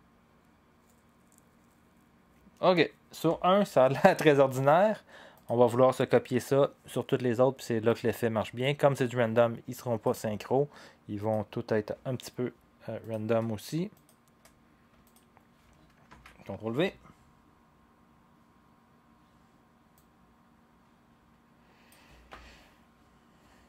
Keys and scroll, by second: 3.2 0, 16.1 ctrl+v, 22.3 0.